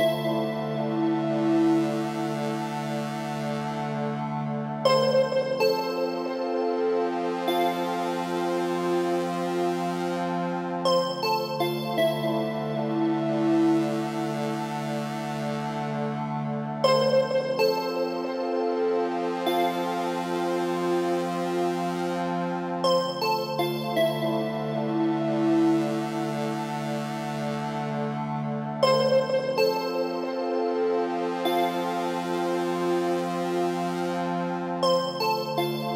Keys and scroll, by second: 0.6 Return, 6.9 ctrl+g, 10.4 Return.